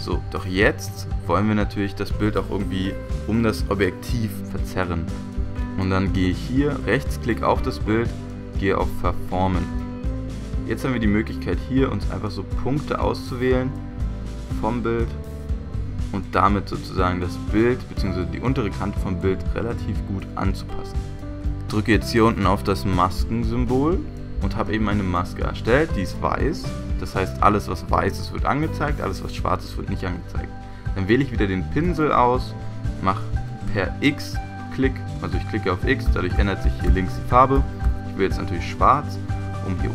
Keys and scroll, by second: 21.3 Return, 36.0-37.8 typing.